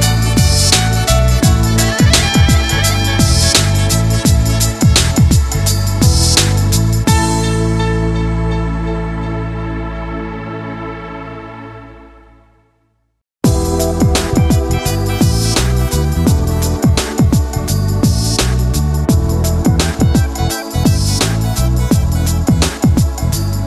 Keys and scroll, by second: 8.5 ctrl+z.